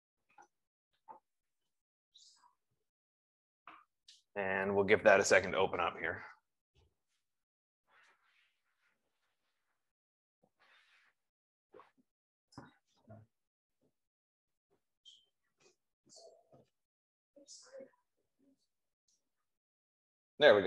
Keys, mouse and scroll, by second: 17.0 F15.